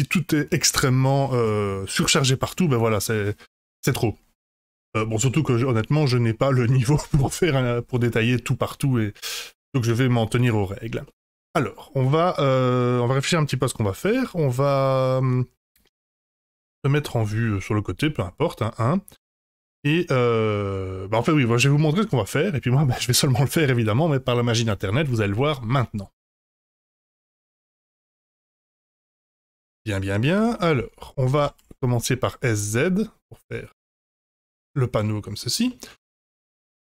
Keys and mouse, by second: 11.0-11.7 middle drag, 12.4-13.0 middle drag, 14.5-15.6 middle drag, 16.3 KP_1, 28.8 F5, 29.3-29.8 middle drag, 30.3 KP_1, 31.3 s, 35.6-36.8 middle drag.